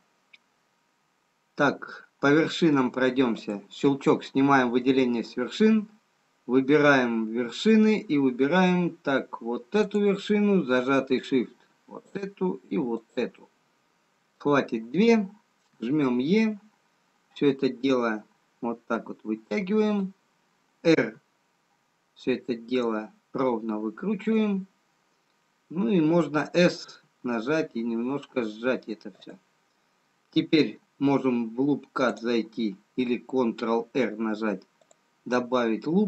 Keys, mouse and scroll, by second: 3.5 click, 10.4 click, 12.1 shift+click, 13.3 shift+click, 15.9 e, 21.3 r, 26.9 s, 32.2 click, 32.8-34.5 scroll up 2.